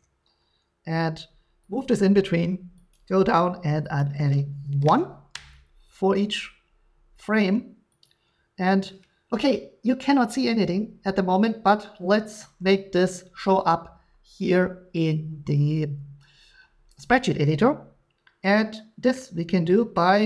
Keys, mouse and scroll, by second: 1.8 click, 2.9 click, 4.0 click, 4.8 1, 5.3 Return, 8.0 click, 10.5-13.4 drag, 19.1-19.9 scroll, 19.9-20.2 scroll.